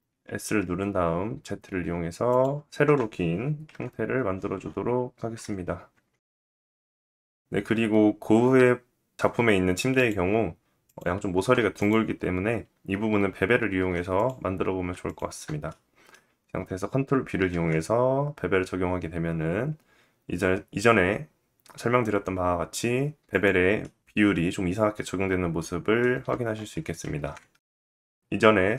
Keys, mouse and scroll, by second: 2.6 KP_1, 3.5 KP_1, 4.5 s, 5.7 middle click, 5.7 KP_1, 6.5 middle click, 9.5 click, 10.4 click, 10.9 Tab, 11.3 click, 13.3 2, 13.7 click, 14.6 shift+click, 15.2 middle click, 15.8-16.4 scroll up 2, 17.0 ctrl+b, 24.0 middle click, 27.8 ctrl+z.